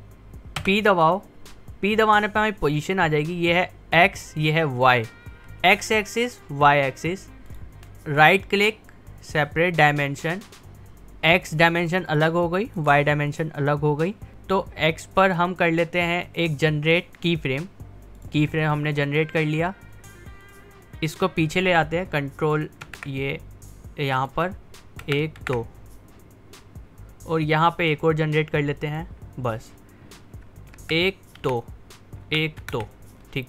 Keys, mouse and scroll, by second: 0.6 p, 7.5 click, 7.6 p, 8.2 right click, 9.8 click, 16.1 click, 20.5-22.9 drag, 22.9 ctrl+Right, 23.8-25.1 drag, 25.1 ctrl+Left, 28.9 click, 30.8 ctrl+Right, 32.3 ctrl+Left.